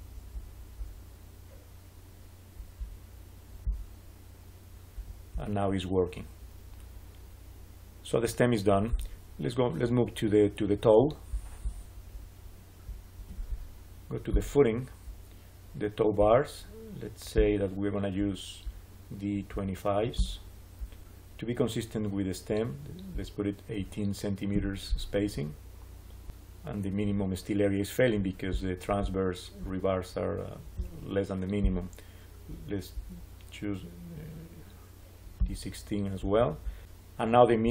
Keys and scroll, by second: 24.4 Return.